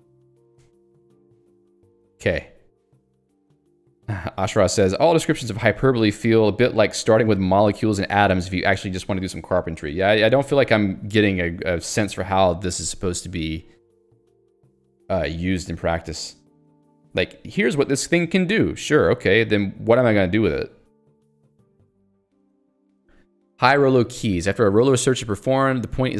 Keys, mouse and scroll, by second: 3.6 middle click, 14.1 click, 14.2 Escape, 23.7 j.